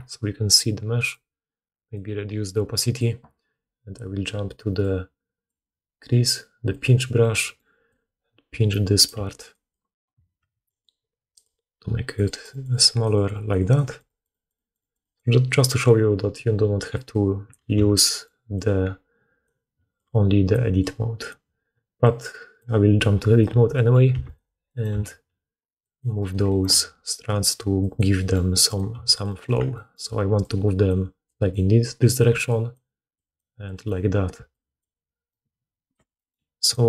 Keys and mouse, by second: 7.4-9.4 drag, 9.0 f, 9.7-15.4 drag, 15.6-18.2 drag, 17.7 g, 21.6-22.9 drag, 21.6-22.9 middle drag, 21.6-22.9 right drag, 23.2 click, 23.2 middle click, 23.2 right click, 24.0 2, 24.1 click, 24.1 middle click, 24.1 right click, 24.8 g, 25.7 click, 25.7 middle click, 25.7 right click, 26.1 click, 26.2 middle click, 26.6 g, 27.7 click, 28.6 click, 28.8 g, 29.2 click, 30.0-35.8 typing, 32.2-36.7 drag, 35.2 middle click, 35.2 right click.